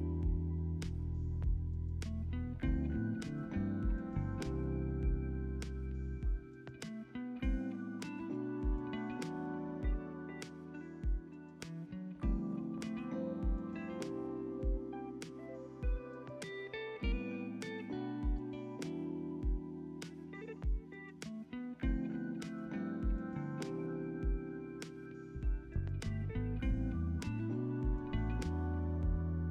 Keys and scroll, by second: 11.2 space, 12.6 space, 12.9 ctrl+s, 18.5 ctrl+s.